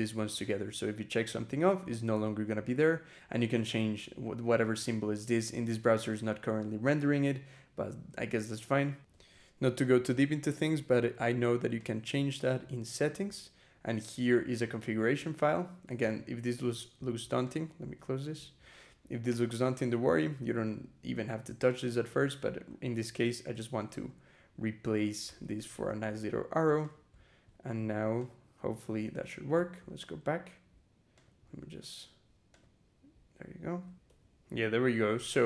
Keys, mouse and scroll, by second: 0.3 click, 8.9 e, 10.5 click, 11.6 click, 12.5 scroll down 2, 14.4 click, 15.4 scroll down 2, 15.8 ctrl+-, 17.3 click, 17.8 q, 18.5 scroll down 2, 19.2-19.9 scroll down 4, 20.3-20.7 scroll down 2, 21.5 click, 21.9 BackSpace, 23.5 shift+', 24.2 Delete, 25.1 -, 25.5 shift+., 26.7 click, 27.0-27.6 scroll up 2, 28.0 click, 28.8 ctrl+r, 29.8 click, 31.0 click, 32.3 click, 33.9 e.